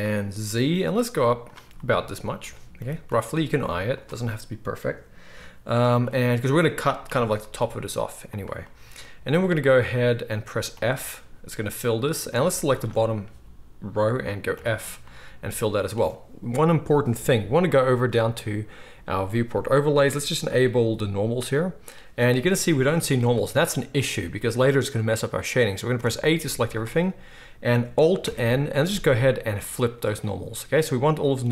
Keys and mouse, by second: 1.5-12.7 middle drag, 2.8 g, 7.0 g, 10.7 f, 12.2 alt+a, 12.7 alt+shift+click, 12.8-18.2 alt+shift+middle drag, 14.5 f, 18.2-31.5 drag, 22.9 z, 25.9 a, 26.3 z, 28.2 alt+n.